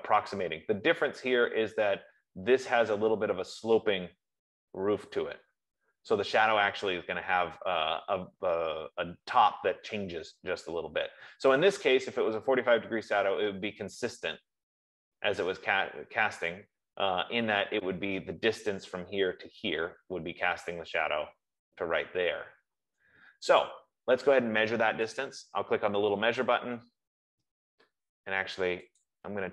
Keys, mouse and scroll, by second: 16.1-21.2 middle drag, 25.6-27.8 drag, 28.4 F15, 29.4 click.